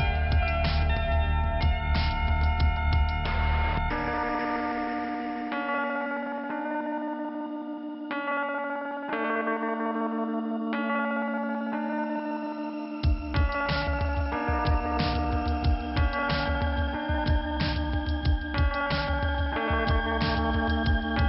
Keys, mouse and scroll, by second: 0.3 click, 0.8 click, 3.0 click, 5.1 middle click, 6.0 click, 6.9 click, 7.0 click, 8.0 click, 10.8 click, 12.1 click, 12.2 click, 12.6 click, 14.0 click, 15.7 click, 15.8 click, 16.1 click, 16.9 double click, 18.7 click, 18.8 click, 20.3 click.